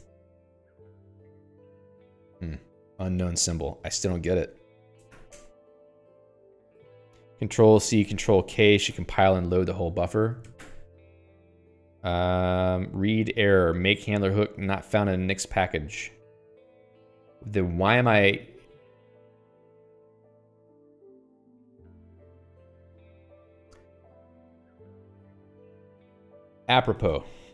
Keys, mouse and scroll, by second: 0.2 Return, 5.5 0, 5.7 Return, 9.3 Escape, 11.0 ctrl+k, 13.0-14.1 scroll down 2, 14.1-15.2 scroll down 1, 15.3 click, 15.9 click, 16.1-16.7 scroll down 3, 16.7 click, 16.9 scroll up 1, 20.8 click, 26.3 Escape, 26.5 Escape, 26.9 alt+x, 27.3-27.5 typing.